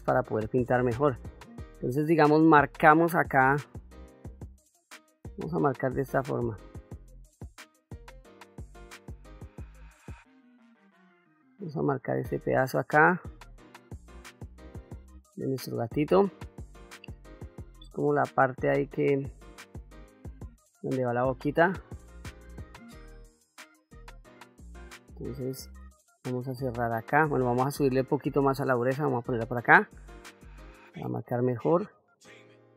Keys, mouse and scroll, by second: 1.4 click, 2.0 middle click, 3.5 click, 5.1-6.8 drag, 7.2 click, 8.5 click, 9.8-11.0 drag, 11.4-12.7 drag, 13.5 click, 14.5 middle click, 16.0 middle click, 17.4-18.9 drag, 19.2 middle click, 19.8-23.2 drag, 23.5 middle click, 24.5 click, 25.0 middle click, 26.1 click, 27.6-28.8 shift+f, 29.3 click, 30.6 click, 31.7-32.7 drag.